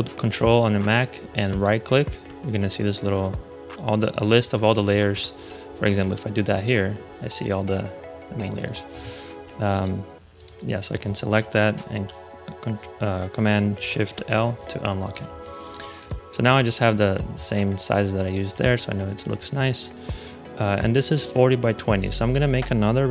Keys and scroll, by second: 5.0 ⟲, 13.7 shift+super+l, 15.2 space.